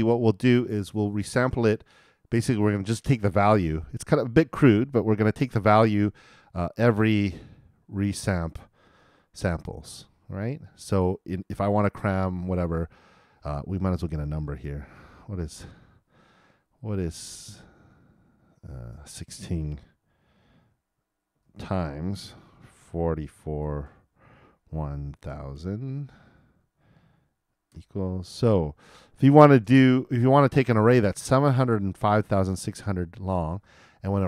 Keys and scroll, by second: 22.1-23.0 typing.